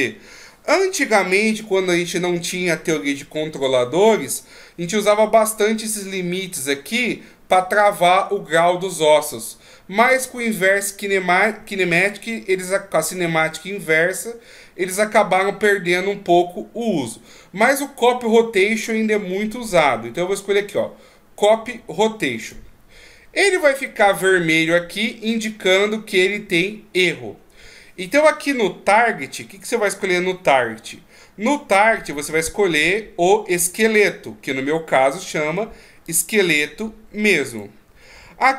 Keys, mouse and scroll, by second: 36.0 click.